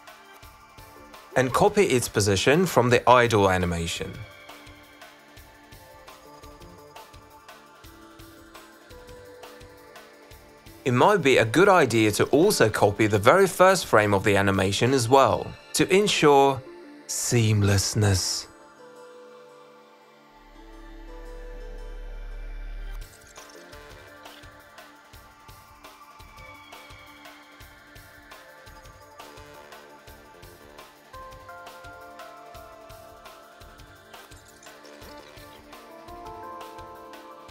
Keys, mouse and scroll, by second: 0.0 click, 0.3 click, 0.6 middle click, 1.3 ctrl+c, 1.4 click, 2.2 click, 3.5 click, 3.6 click, 3.9 middle click, 4.1 ctrl+c, 4.4 click, 6.9 ctrl+v, 7.4 click, 11.6 click, 12.8 click, 13.2 click, 13.7 click, 14.2 click, 15.1 click, 16.0 click, 17.6 click, 19.7 click, 20.4 click, 21.0 click, 21.2 click, 22.1 ctrl+c, 22.2 click, 22.8 click, 22.9 click, 22.9 click, 23.1 ctrl+v, 23.4 click, 24.2 click, 25.8 click, 26.8 click, 29.5 click, 29.8 click, 30.5 ctrl+c, 31.1 click, 31.5 ctrl+alt+v, 33.2 click, 33.5 click, 36.1 click, 37.2 click.